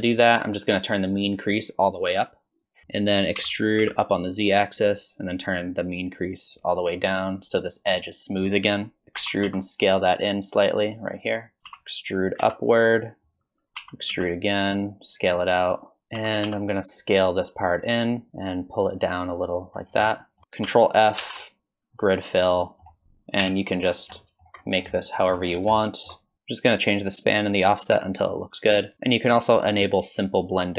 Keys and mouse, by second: 2.6 click, 3.4 e, 6.2-7.3 drag, 9.2 e, 11.7 e, 13.8 e, 16.2 e, 19.0 click, 20.1 shift+middle click, 21.2 ctrl+f, 22.6 middle click, 23.4 KP_7, 24.2 shift+middle click, 25.0 shift+middle click, 25.8 middle click, 30.6 click.